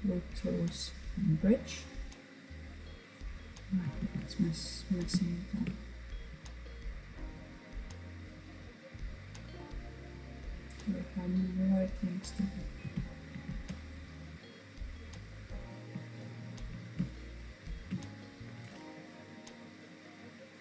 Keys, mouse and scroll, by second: 1.0-1.5 scroll down 2, 1.5-3.0 middle drag, 3.0 alt+z, 3.5-4.3 scroll up 2, 4.3-7.5 shift+middle drag, 7.5 click, 8.4-11.8 middle drag, 11.8 ctrl+z, 12.3 ctrl+z, 14.3 click, 15.2 alt+click, 16.4 alt+shift+click, 18.1-20.6 right drag.